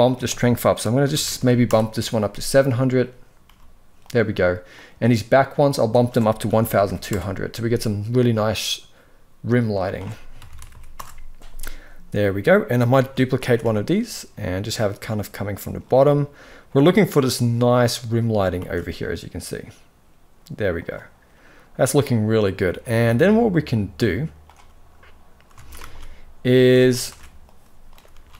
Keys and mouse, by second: 1.0 0, 3.2 g, 5.7-6.8 drag, 6.5 0, 9.6-10.6 drag, 10.4 0, 12.8 shift+d, 18.3 shift+d, 24.1 click, 25.3 alt+a, 25.6 ctrl+s, 26.2 shift+middle drag, 26.7 ctrl+b, 27.8 ctrl+s.